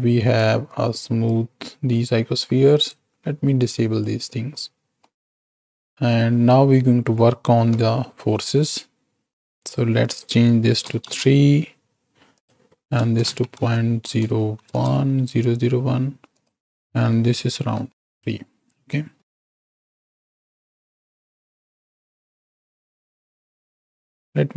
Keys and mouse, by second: 0.0-0.3 drag, 0.7 click, 2.7-4.1 drag, 5.1 middle click, 6.3 middle click, 7.6 KP_7, 10.0-11.0 drag, 12.3-14.8 drag, 16.3-18.0 drag, 19.5 shift+Right, 19.6 shift+Left, 20.2 space, 21.3-22.3 drag, 23.3 space.